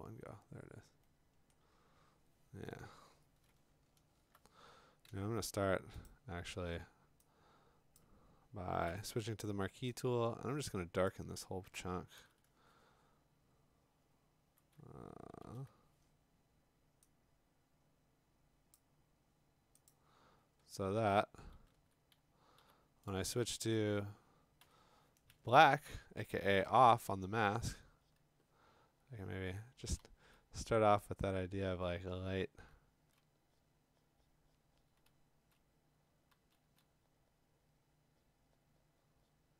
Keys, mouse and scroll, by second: 0.7 middle click, 1.5 middle click, 3.8-4.3 scroll, 5.1 m, 6.1 click, 8.0 click, 8.9 m, 11.1 click, 12.2 ctrl+u, 15.4 ctrl+i, 18.8 click, 19.9 click, 21.5 ctrl+d, 22.6 b, 23.1 right click, 23.9 Escape, 24.6 x, 26.7 Escape, 29.8 [, 30.0 [, 32.4-33.2 ], 35.1 [, 36.3 [, 36.6 [.